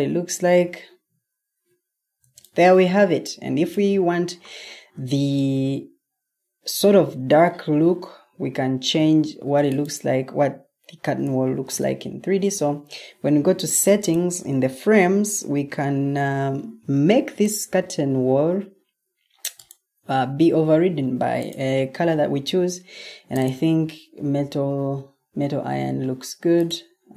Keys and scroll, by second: 0.0 Escape, 0.8 Escape, 2.1 o, 9.0 Escape, 11.5 ctrl+t.